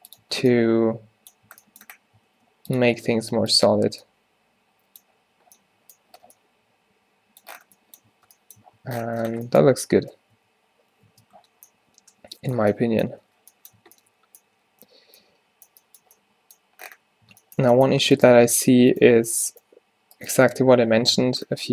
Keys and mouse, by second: 0.3 Tab, 1.5 Tab, 2.4 ctrl+r, 3.9 Tab, 8.2 Tab, 8.7 Tab, 9.3 Tab, 9.7 space, 11.2 Tab, 13.3 a, 13.9 a, 17.4 Tab, 18.1 Tab, 18.2-19.4 middle drag, 18.4 Tab, 19.4 g, 19.7 g, 20.8 o.